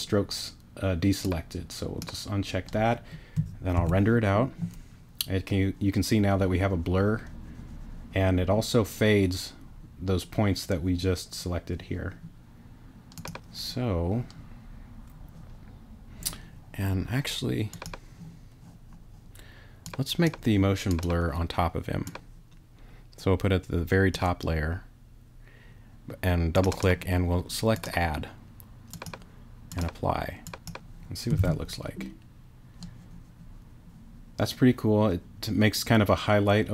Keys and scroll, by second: 3.7 super+r, 31.4 super+r.